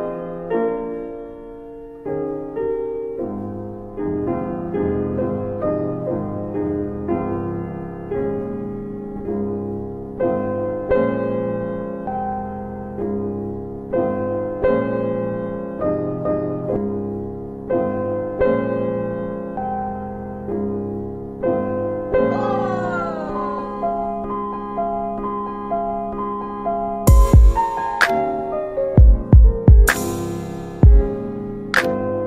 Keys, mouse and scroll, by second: 1.5 click, 3.3 alt+w, 3.7 alt+w, 4.7 middle click, 4.8-5.3 scroll up 2, 5.5 scroll up 2, 5.7 middle click, 6.0 click, 8.6-9.5 scroll up 1, 12.1 click, 12.6 double click, 13.7 z, 14.9 alt+middle click, 15.6 click, 16.9 middle click, 17.5 alt+middle click, 17.9-18.4 scroll up 2, 18.1 middle click, 18.7 alt+middle click, 19.0-19.7 scroll up 2, 19.1 double middle click, 20.1 double middle click, 21.1 click, 23.3 ctrl+click, 23.9 alt+w, 24.3 alt+w, 25.1 middle click, 25.1-26.0 scroll up 2, 26.2 ctrl+z, 26.6 alt+w, 27.1 alt+w, 28.7 click, 29.3 alt+w, 29.6 alt+w, 30.5 middle click, 31.1 middle click.